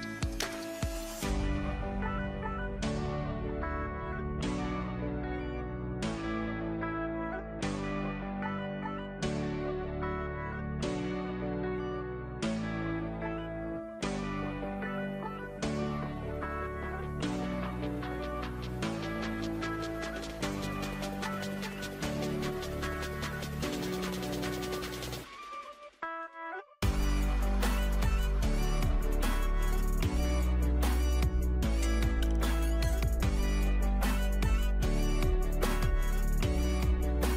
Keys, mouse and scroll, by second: 10.7 click, 17.9 click.